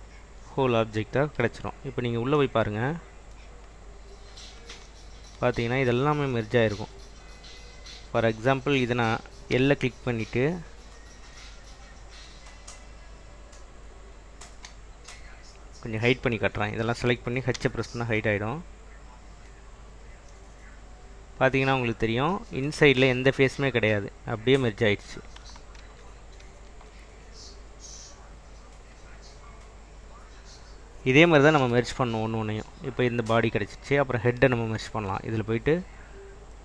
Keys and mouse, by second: 1.6 Tab, 5.9 shift+middle click, 7.1 middle click, 7.8 click, 8.6 click, 9.8 l, 10.9 click, 11.0 middle click, 12.1-13.1 middle drag, 14.0 click, 17.7 h, 18.9 middle click, 19.2-20.4 middle drag, 24.8 middle click, 26.0 ctrl+z, 26.6 ctrl+z, 27.6 middle click, 29.4 Tab, 31.7 /, 32.5 click, 35.5-36.6 drag.